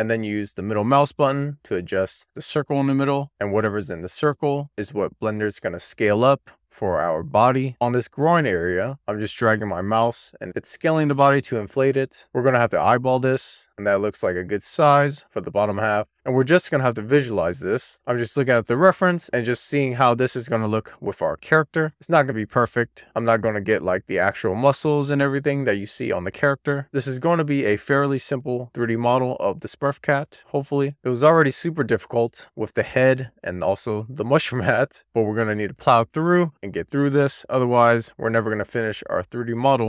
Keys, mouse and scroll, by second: 1.0-1.3 scroll down 1, 1.3-1.7 scroll up 1, 2.0-2.4 scroll up 5, 4.5-5.5 scroll down 1, 5.5-9.1 scroll down 2, 16.4 scroll up 2, 16.6-17.0 scroll down 1, 17.0 click, 17.2-17.6 scroll up 1, 17.6 alt+z, 18.6 ctrl+a, 19.3 Escape, 20.3 shift+a, 24.6 shift+click, 24.8 right click, 25.2 click, 25.4 click, 27.5 alt+z, 27.7 ctrl+a, 28.9 Escape, 29.3 ctrl+a, 29.5-30.5 scroll down 1, 30.7 scroll down 2, 31.0-32.1 scroll up 1, 32.4-33.4 scroll down 1, 34.0 click, 34.2 scroll down 3, 34.5 scroll up 2, 34.5 middle click, 34.6 scroll down 1, 34.8 shift+middle click, 35.0 scroll up 1, 35.3 scroll down 1, 35.3 shift+middle click, 36.2 middle click, 36.5-37.3 scroll up 1, 37.3 middle click, 37.8 click, 38.5 middle click, 39.1 super+z, 39.4 middle click.